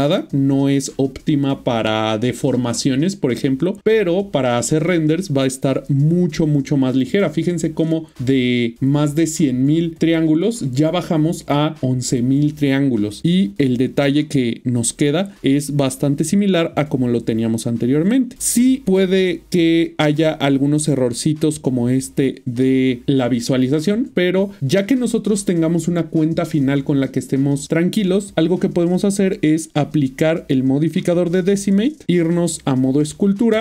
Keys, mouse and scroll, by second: 5.4 middle click, 13.5 typing, 15.5 ctrl+middle click, 16.2 middle click, 18.8 shift+middle click, 29.3 click, 31.1 click, 32.2 click, 32.8 Tab.